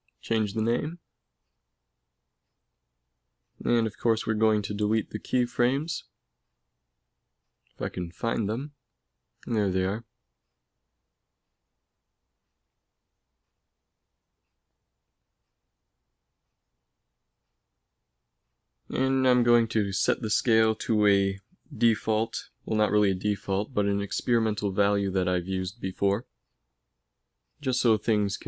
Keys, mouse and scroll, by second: 0.1-7.6 drag, 9.5-12.6 drag, 10.3 a, 10.8 b, 13.2 x, 16.0-21.9 drag, 23.6 ctrl+c, 24.2 ctrl+v, 24.7 ctrl+v, 26.0 ctrl+s.